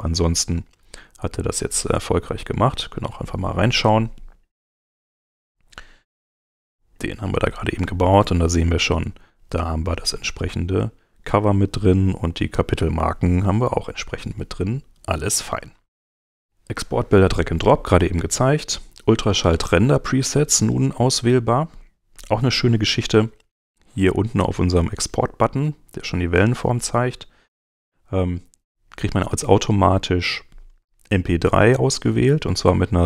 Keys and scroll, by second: 4.5 Left, 7.8 space, 21.4 super+Tab.